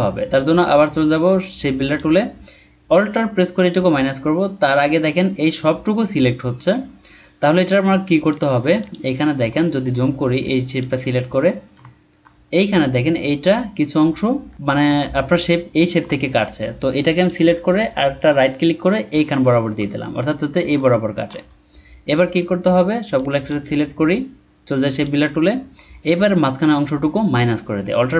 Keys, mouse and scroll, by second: 9.1-9.4 scroll down 1, 9.7 alt+scroll up 1, 11.3 scroll down 1, 11.9-12.3 alt+scroll up 1, 14.8-15.3 alt+scroll up 1, 16.0 alt+scroll down 1, 16.6-17.9 alt+scroll down 1, 17.9 right click, 19.5 scroll down 1, 20.7 alt+scroll down 1.